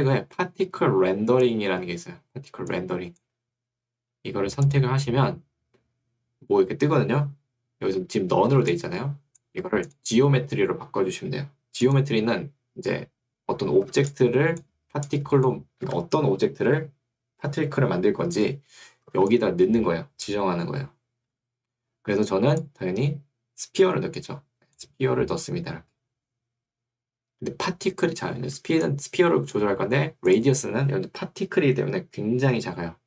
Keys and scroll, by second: 4.0 Escape, 9.6 Escape, 15.8 Escape, 29.6 Escape.